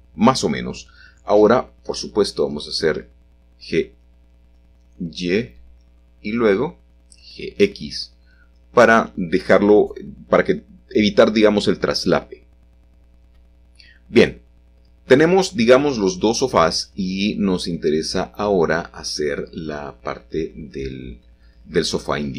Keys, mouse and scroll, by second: 1.7 middle click, 2.7 g, 2.9 y, 5.1 click, 6.1 g, 6.7 x, 8.9-9.5 scroll down 1, 9.5-11.7 middle drag, 13.1-13.9 scroll down 1, 13.9-15.7 shift+middle drag, 14.7-15.6 scroll down 1, 15.6 scroll down 1, 18.0 middle click, 19.4-20.3 scroll up 1, 20.3 shift+middle click.